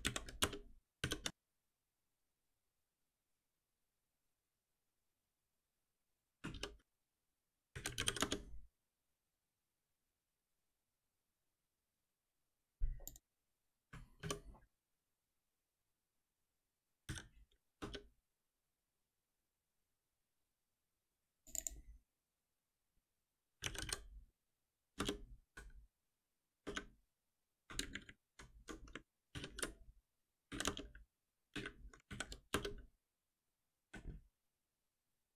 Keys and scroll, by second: 0.0 alt+Delete, 1.0 shift+F10, 6.6 shift+F6, 14.2 alt+F7, 17.0 ctrl+alt+n, 25.0 Return, 29.3 shift+F6, 31.4 Return, 33.6 ctrl+b.